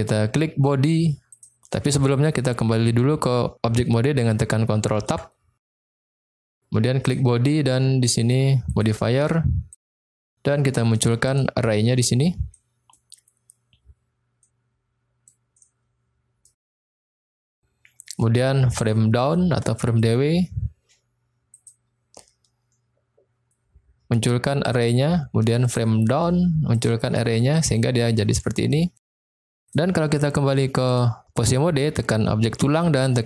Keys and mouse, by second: 1.3 click, 5.0 ctrl+Tab, 6.9 click, 8.7 click, 9.8 click, 11.3 click, 12.5-12.9 middle drag, 14.3-15.3 middle drag, 15.5-16.4 middle drag, 16.6 middle click, 21.6 click, 24.6 click, 25.6 click, 26.6 click, 27.5 middle click, 28.6-29.0 shift+middle drag, 29.6 drag, 30.9 click.